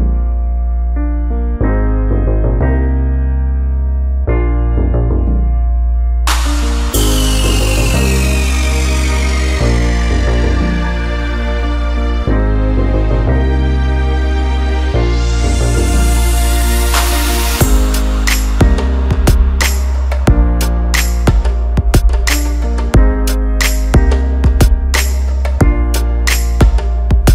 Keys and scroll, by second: 1.7 Return, 7.8 Return, 13.2 ctrl+alt+z, 22.7 Delete.